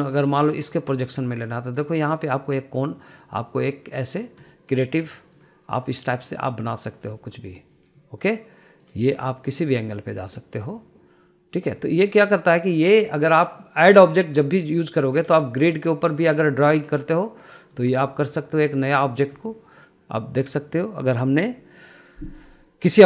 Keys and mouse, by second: 1.8-4.8 drag, 5.1 middle drag, 5.7 middle drag, 6.4-7.8 drag, 8.6-9.4 middle drag, 10.5-12.6 drag, 14.2 click, 15.7 middle click, 16.2-18.5 drag, 18.8-19.8 middle drag, 20.0-20.4 middle drag, 21.2 middle click.